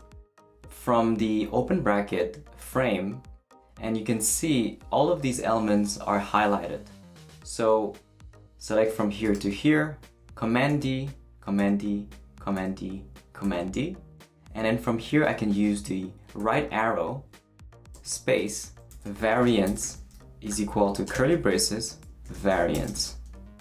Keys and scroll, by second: 10.7 super+d, 16.4 Right, 17.9-23.4 typing.